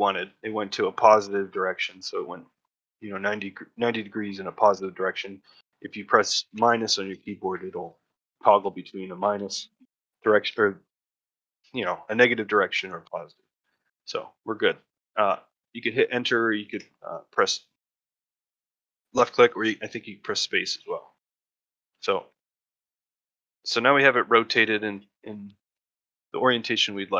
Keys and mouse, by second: 20.6-21.4 shift+middle drag, 21.5 middle drag, 21.9 shift+middle click, 22.2 ctrl+middle drag, 22.5-24.8 shift+middle drag, 25.0 shift+middle drag, 25.6-26.1 ctrl+shift+middle drag, 26.2-26.6 middle drag.